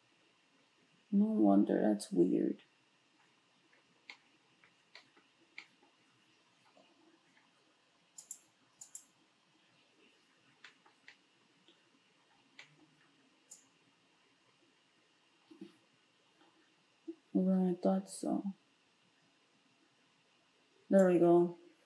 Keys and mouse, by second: 9.0-13.5 shift+middle drag, 13.5-21.8 drag.